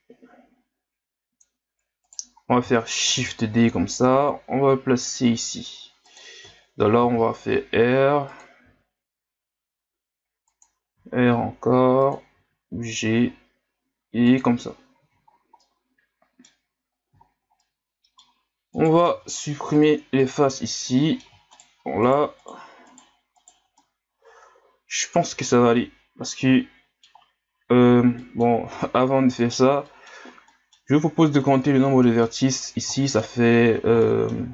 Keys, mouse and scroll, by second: 3.1 shift+d, 6.6 shift+scroll down 4, 7.0 r, 8.6 g, 11.0 r, 12.4 g, 15.3 scroll down 1, 15.6-16.7 middle drag, 16.7 scroll up 2, 17.2 scroll down 5, 17.6-18.7 middle drag, 18.7 right click, 19.1 ctrl+Tab, 20.2 right click, 20.5-21.5 middle drag, 21.5-22.1 shift+right drag, 22.4 shift+right click, 22.9 shift+right click, 23.4 shift+right click, 23.8-26.8 middle drag, 28.2 middle click, 28.7 ctrl+Tab, 29.9-34.5 middle drag.